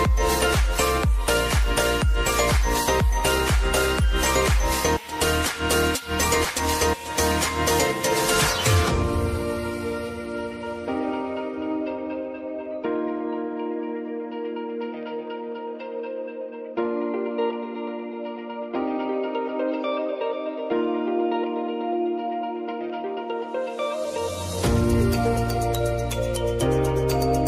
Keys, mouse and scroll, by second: 0.8 Up, 1.9 Left, 2.7 Up, 3.5 Down, 3.9 Left, 4.7 space, 4.8 click, 5.2 space, 7.2-14.1 drag, 14.1 v, 14.8-17.7 drag, 17.7 Left, 18.9 Down, 19.5 Up, 21.9 click, 22.9 ctrl+d, 24.0-27.4 drag.